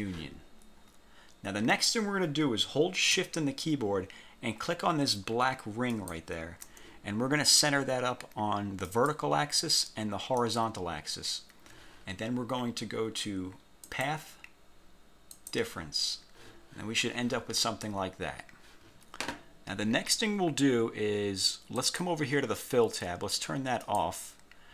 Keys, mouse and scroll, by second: 0.9-1.2 scroll up 2, 6.0 shift+click, 9.0 click, 10.5 click, 14.0 click, 15.4 click, 21.9 click, 24.0 click.